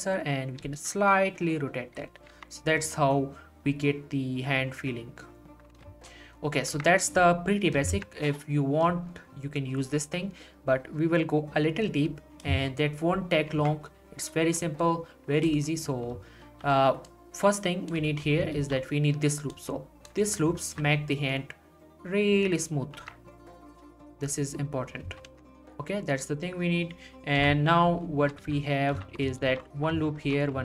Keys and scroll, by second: 2.3 Tab, 5.8 Tab, 6.7 Tab, 13.5 Tab, 16.4 ctrl+r, 18.5 ctrl+r, 20.7 alt+s, 23.0 Tab, 25.3 Tab, 27.4 1, 28.4 z, 29.4 ctrl+r, 30.2 ctrl+r.